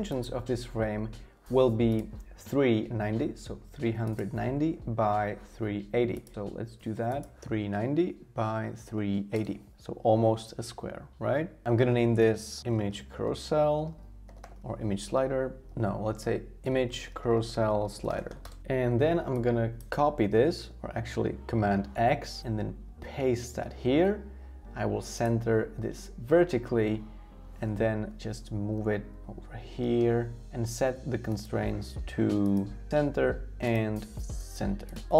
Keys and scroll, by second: 7.2-8.9 typing, 11.4-13.3 typing, 14.8-17.5 typing, 21.7 super+x, 23.1 super+v, 28.8 shift+Left, 29.1 shift+Left.